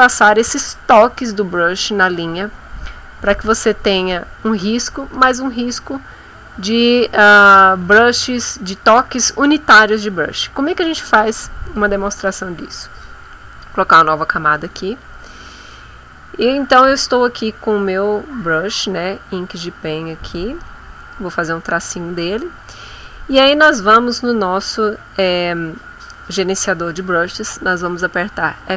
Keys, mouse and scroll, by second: 13.1 click, 14.6 click, 18.0-20.4 drag, 22.2 middle click, 28.5 F5.